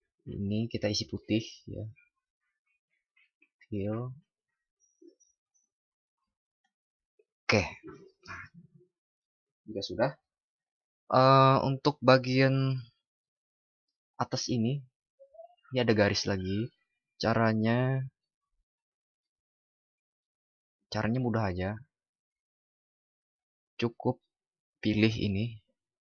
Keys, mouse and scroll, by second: 6.5 ctrl+d.